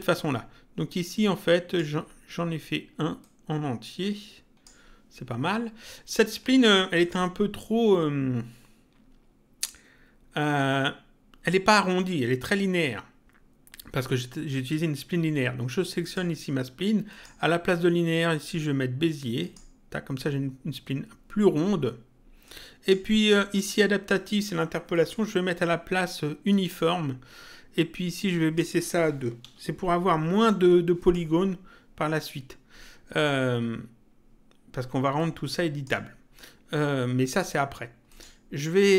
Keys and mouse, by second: 1.1 click, 3.1 click, 6.9 click, 15.9 click, 19.3 click, 22.4 click, 24.8 click, 26.4 click, 28.2 click, 30.9 click, 35.1 click, 38.0 click.